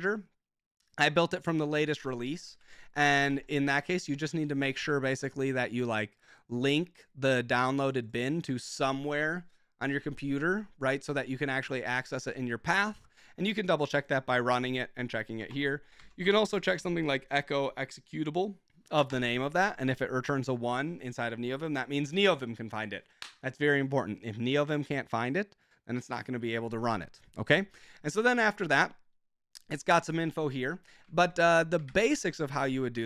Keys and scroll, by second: 2.6 super+k, 3.2 ctrl+Tab, 15.5 ctrl+shift+Tab, 15.8-17.1 typing, 19.0 Return, 31.2 ctrl+j, 31.9 ctrl+j, 32.6 ctrl+w, 32.7 ctrl+j.